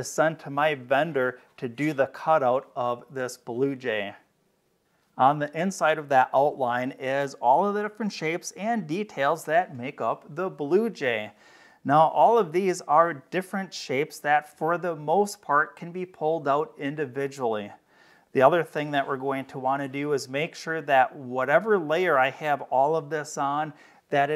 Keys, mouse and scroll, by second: 13.1 click, 18.1 click, 21.3 click.